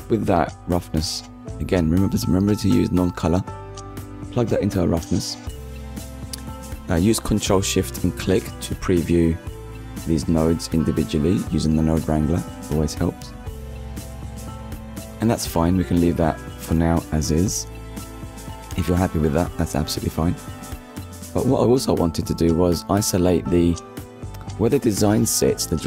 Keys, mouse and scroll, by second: 0.8 ctrl+shift+click, 1.7 middle click, 4.1-4.5 scroll down 1, 4.5 middle click, 5.3 ctrl+shift+click, 6.2 middle click, 8.6-8.9 scroll down 1, 9.1 shift+middle click, 9.6 middle click, 11.4-11.8 scroll down 1, 12.3 scroll down 1, 12.9 scroll down 1, 13.3 middle click, 14.9 scroll up 1, 15.8 shift+middle click, 17.6-18.0 scroll down 1, 18.0 middle click, 18.8 ctrl+s, 20.2 click, 21.1 shift+d, 23.2 click, 24.2 middle click, 25.6 click.